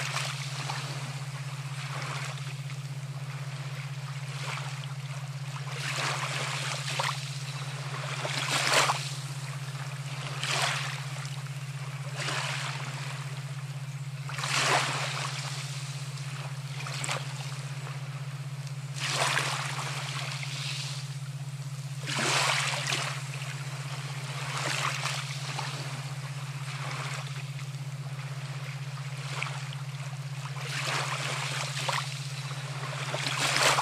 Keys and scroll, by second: 8.6-9.1 ], 18.4 typing, 24.7-25.1 typing, 32.0 ].